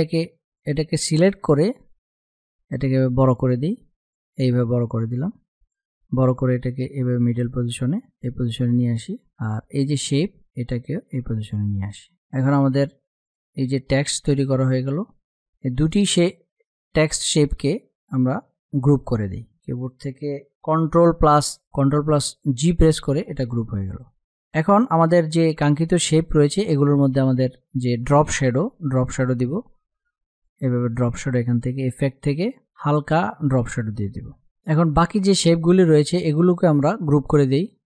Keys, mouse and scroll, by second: 0.0-4.2 drag, 4.2-6.4 drag, 6.4 Left, 7.7 Down, 8.9-11.2 drag, 11.8 space, 12.0 click, 18.1 right click, 19.2 click, 21.0 click, 22.2 ctrl+g, 22.6 click, 29.8 click, 34.1 F8, 34.6 click.